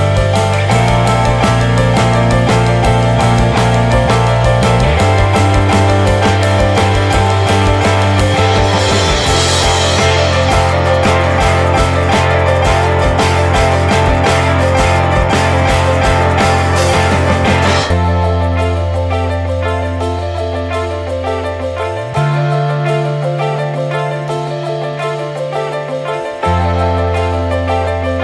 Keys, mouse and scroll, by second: 0.3 Tab, 0.4 click, 0.8 ctrl+a, 1.5 Tab, 1.7 scroll down 2, 1.9 middle click, 2.5 click, 2.8 middle click, 3.3 2, 3.5 click, 4.1 shift+click, 5.0 shift+middle click, 5.5 shift+click, 5.9 middle click, 6.5 shift+click, 7.0 middle click, 7.8 scroll down 2, 8.0 middle click, 8.6 shift+d, 10.6 middle click, 11.0 p, 11.7 Tab, 12.0 click, 12.7 Delete, 13.3-13.8 middle drag, 13.8 click, 14.1-15.7 middle drag, 15.7 ctrl+s, 15.9 shift+middle click, 16.9 click, 17.7-18.7 drag, 18.7 scroll down 1, 18.9-20.4 middle drag, 20.4-27.4 drag, 27.4 scroll down 2, 27.6 click, 27.9-28.2 middle drag.